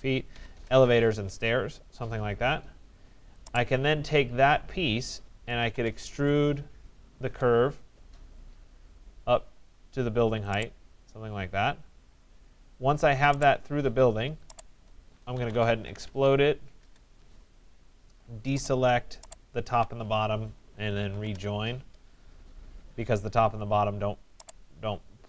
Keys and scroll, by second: 0.2 alt+Return, 6.9 alt+Return, 16.4 alt+Return, 20.9 alt+Return.